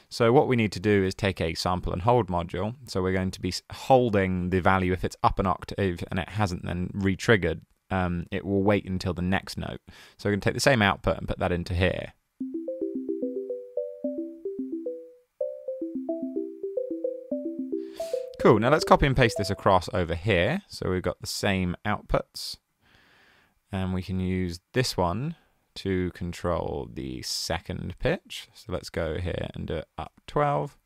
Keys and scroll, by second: 0.6-1.5 typing, 19.1 space, 19.2 super+c, 19.9 super+v, 29.7-30.5 typing.